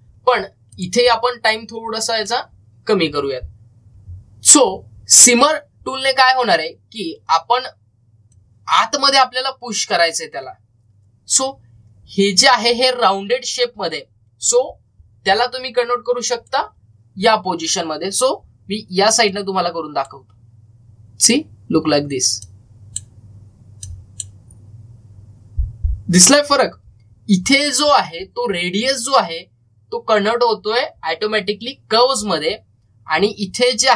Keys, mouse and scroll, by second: 1.5-5.5 drag, 2.4-3.1 typing, 5.1-5.8 typing, 9.0-9.7 typing, 9.2 click, 9.2-12.3 drag, 14.5 scroll up 1, 17.2 click, 18.0 scroll down 1, 20.1-21.7 drag, 21.7 scroll up 1, 23.2-27.6 drag, 33.7 scroll up 1.